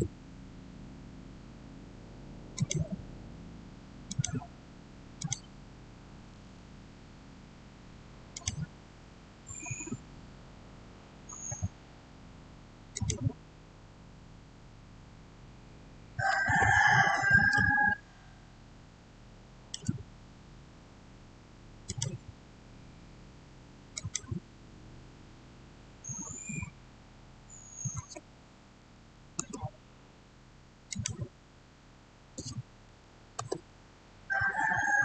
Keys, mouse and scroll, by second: 2.4 click, 8.2 click, 8.2 click, 10.4-12.1 scroll up 1, 12.8 click, 17.0 click, 17.4-21.7 shift+middle drag, 21.7 click, 23.8 click, 27.9 click, 27.9-29.1 typing, 29.2 Return, 30.8 click, 32.2-32.7 typing, 33.2 Return, 34.1-35.0 scroll down 1.